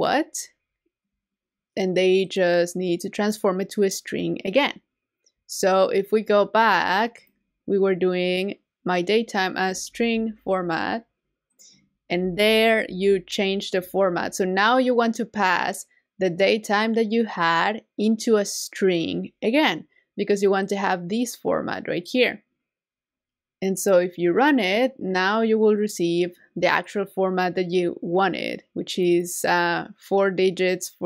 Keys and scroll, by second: 9.9 super+c, 11.0 c, 12.8 super+v.